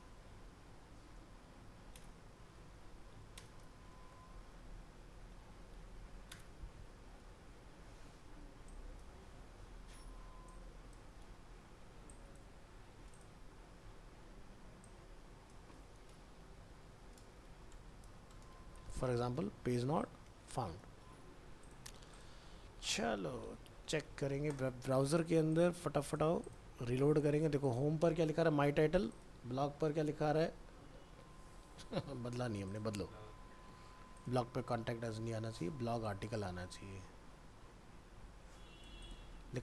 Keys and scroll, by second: 2.0 ctrl+v, 6.4 ctrl+v, 9.6 ctrl+x, 11.2 ctrl+v, 14.0 ctrl+s, 20.2 ctrl+s, 22.9 ctrl+w, 23.0 ctrl+s, 23.2 ctrl+w, 23.5 ctrl+s, 23.7 ctrl+w, 23.9 ctrl+s, 24.1 ctrl+w.